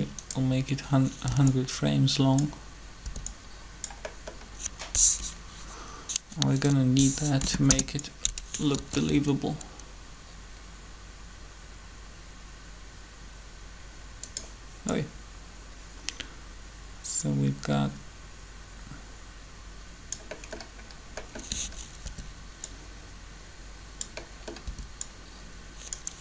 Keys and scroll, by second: 1.2 b, 3.0 b, 7.1 shift+Delete, 7.4 Return, 8.7 alt+a, 22.0 b, 24.6 b.